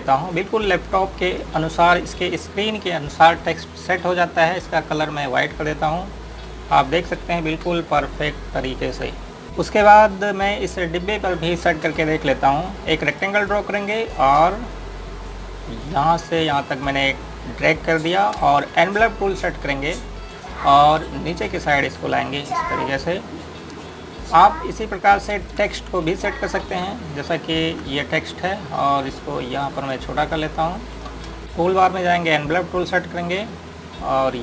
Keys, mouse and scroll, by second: 2.7 scroll up 1, 5.1 click, 6.8-7.5 scroll down 1, 7.5 click, 8.3 Delete, 8.9 scroll up 1, 9.4 click, 13.9 click, 14.5-16.5 scroll up 1, 16.5 click, 19.2 space, 23.7 click, 26.2 space, 26.8-27.3 scroll down 1, 27.3 click, 29.1 click, 29.6 right click, 30.4-31.1 scroll up 1, 31.1 click, 31.4 click.